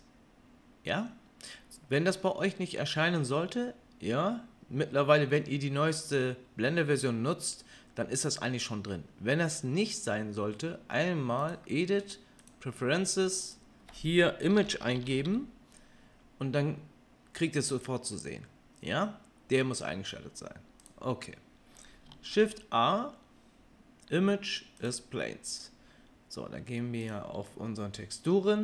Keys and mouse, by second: 10.3-11.4 middle drag, 11.4-12.5 drag, 22.2 shift+a, 26.4-28.6 drag.